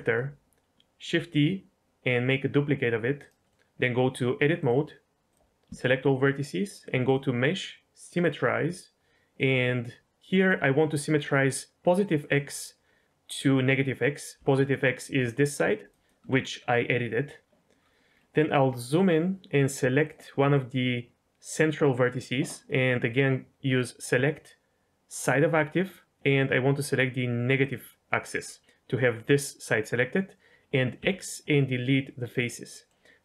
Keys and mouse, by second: 1.1 shift+d, 3.4 middle click, 4.6-5.3 drag, 5.6 a, 7.2-8.2 drag, 9.3-12.3 drag, 14.3 d, 14.4 click, 14.9 click, 14.9 d, 15.6 click, 18.4 click, 20.0 click, 20.3 click, 23.7-25.3 drag, 26.7-27.6 drag, 30.9 x, 32.7 middle click.